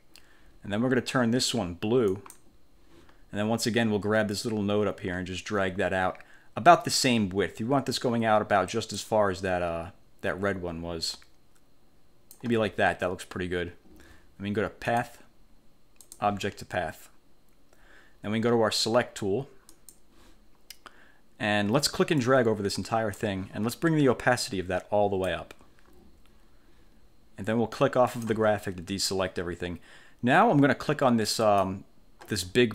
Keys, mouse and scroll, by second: 2.3 click, 4.5-9.3 drag, 15.0 click, 16.1 click, 19.8 click, 22.3 click, 24.5 click, 28.2 click, 31.5 click, 32.5-32.7 ctrl+scroll up 2.